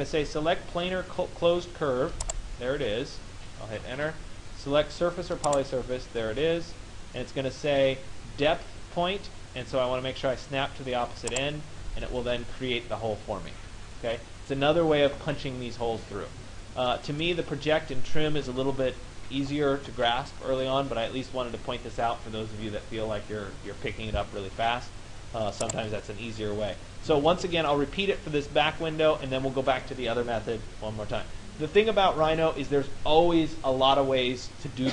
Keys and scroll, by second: 3.5 Return.